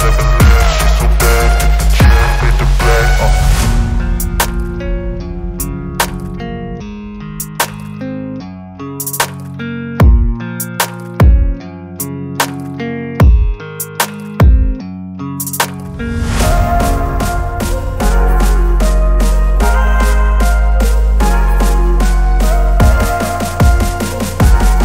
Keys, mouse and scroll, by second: 1.1-2.9 drag, 4.2 click, 6.2 click, 8.3 click, 16.3-18.0 drag, 18.3 click, 20.6 click, 21.0-22.0 drag, 22.9 s, 23.7-24.8 drag.